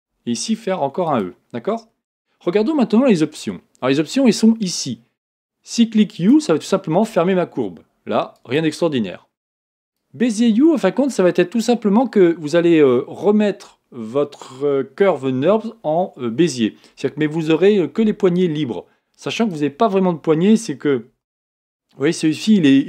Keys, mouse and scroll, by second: 0.0 e, 6.1-10.0 drag, 19.4-21.2 drag, 21.2 g.